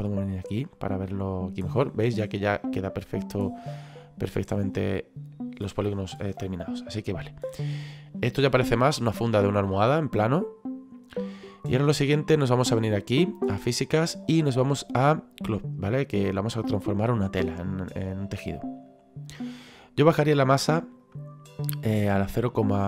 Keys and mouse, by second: 0.2 click, 2.8 middle click, 6.2 middle click, 9.3 middle click, 13.0 click, 16.1 click, 20.5 click, 22.3 click.